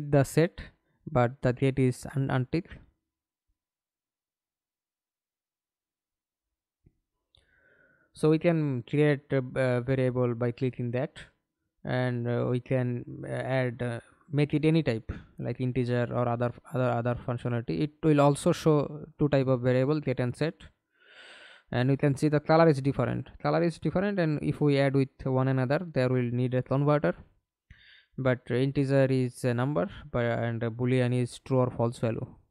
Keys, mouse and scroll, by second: 8.9-10.3 typing, 17.9 right click, 29.5 Delete, 30.7 Delete.